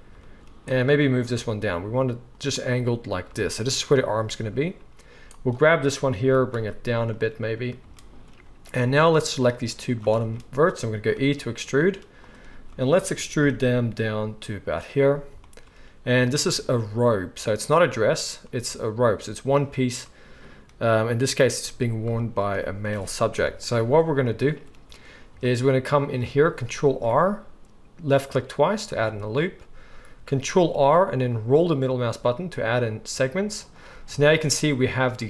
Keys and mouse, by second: 0.6-2.4 drag, 1.3 g, 2.4-5.3 middle drag, 5.3-7.2 drag, 6.2 g, 7.2-9.1 middle drag, 9.1-12.2 drag, 11.1 e, 12.2-35.2 middle drag, 13.4 g, 23.4 KP_1, 26.8 ctrl+r, 30.3 ctrl+r.